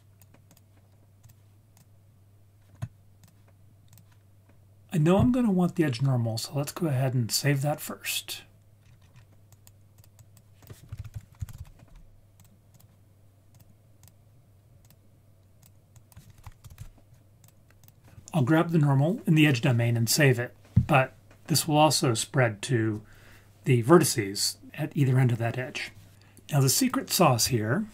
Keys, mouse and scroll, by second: 0.0 click, 0.5 click, 1.7-3.2 drag, 8.6-10.0 scroll up 7, 10.0 click, 10.9 shift+a, 13.5-14.0 drag, 14.8-15.6 drag, 16.2-17.5 drag, 17.8-20.4 drag, 26.8 click.